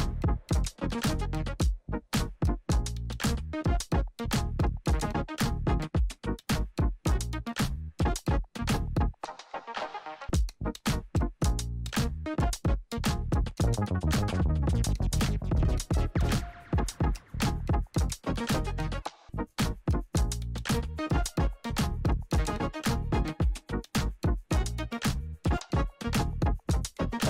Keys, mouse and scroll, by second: 4.6 click, 6.2 click, 8.0-8.6 alt+scroll up 1, 9.3-9.9 alt+scroll up 1, 10.7 p, 12.0 click, 14.6 ctrl+Num_Lock, 14.6 click, 14.7 ctrl+a, 15.8 Return, 17.7 click, 22.5 F4, 23.9 click.